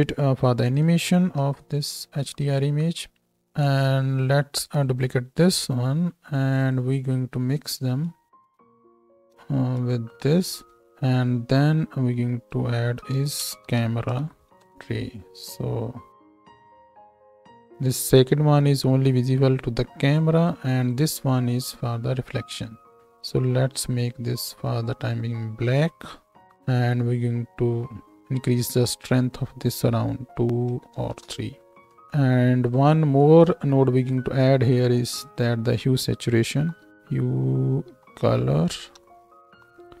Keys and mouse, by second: 0.6 click, 0.7-3.6 shift+middle drag, 1.3 shift+e, 3.6-5.0 right drag, 5.0-7.1 shift+middle drag, 5.6 shift+d, 7.1-8.3 drag, 8.3 ctrl+shift+middle click, 8.4-16.2 ctrl+shift+drag, 10.6 middle click, 10.6 right click, 10.8 shift+e, 11.5-16.2 middle drag, 11.5-16.2 right drag, 16.3-18.1 right drag, 17.3 ctrl+h, 20.9-23.7 right drag, 24.0-29.3 right drag, 36.9 Down, 38.0 Down, 38.2 Down, 39.5-40.0 drag, 39.5 shift+e.